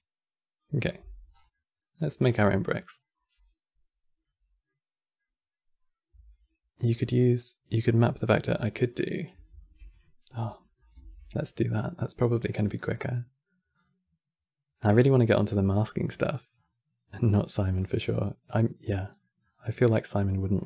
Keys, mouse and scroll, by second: 0.5 click, 0.7 x, 1.0 scroll down 5, 1.2 middle click, 1.9-2.3 scroll down 4, 2.3-7.5 middle drag, 9.2 ctrl+z, 9.7 middle click, 10.0-10.3 scroll up 5, 10.3-10.7 middle drag, 10.7 shift+a, 15.8 middle click, 16.3 scroll up 4, 17.5-18.9 drag, 18.9 middle click, 19.1-20.3 scroll up 6, 20.3-20.6 drag.